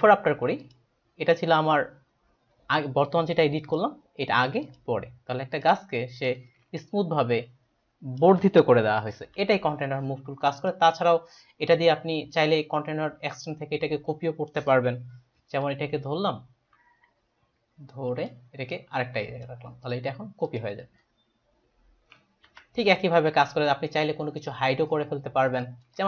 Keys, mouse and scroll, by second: 0.6 click, 3.7 click, 4.6 click, 5.6 click, 6.7 ctrl+space, 6.8 ctrl+click, 9.2 Delete, 10.6 click, 15.7 click, 18.7 click, 20.5 click, 22.5 ctrl+d, 25.5 ctrl+space, 25.6 ctrl+click, 26.0 click.